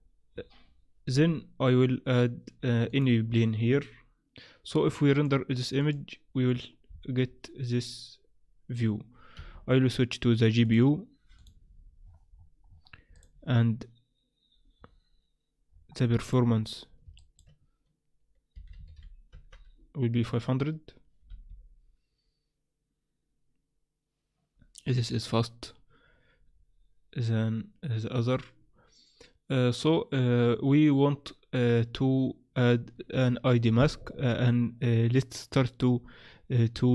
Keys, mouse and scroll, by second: 2.9 click, 5.1 click, 6.4 click, 7.2 scroll down 1, 7.8-8.5 scroll down 4, 10.6 click, 12.0-13.7 scroll down 19, 13.1 click, 14.8-15.7 scroll down 2, 15.7-16.2 scroll down 1, 16.2 click, 16.2-17.0 scroll down 2, 17.0 scroll down 1, 17.2 shift+click, 21.7 F12, 26.9-29.8 scroll down 2, 30.6-33.5 scroll up 1.